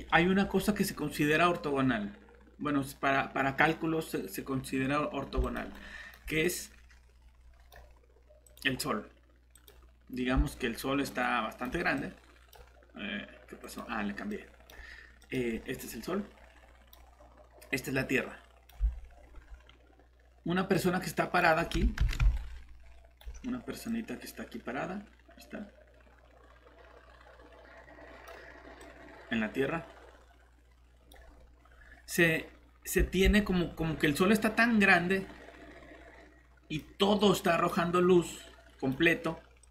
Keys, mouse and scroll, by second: 0.0 scroll down 1, 0.3-1.1 typing, 0.4 scroll up 1, 5.4 click, 5.7 right click, 5.8-6.2 typing, 6.4 click, 10.5 right click, 10.9-11.7 typing, 12.0 click, 18.9-19.2 scroll up 1, 18.9-19.4 typing, 20.7 click, 22.0 ctrl+z, 22.4 right click, 22.7 typing, 23.9 click, 33.4 scroll down 1, 34.8 click.